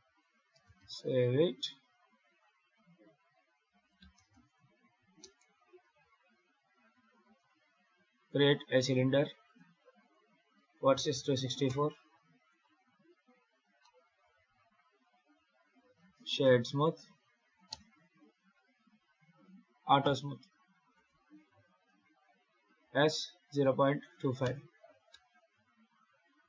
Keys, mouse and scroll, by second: 0.0 ctrl+s, 7.1 shift+a, 9.3 click, 9.9 click, 12.3 click, 13.7 middle click, 15.6 F3, 19.9 q, 21.7 KP_7, 22.7 s, 25.0 g.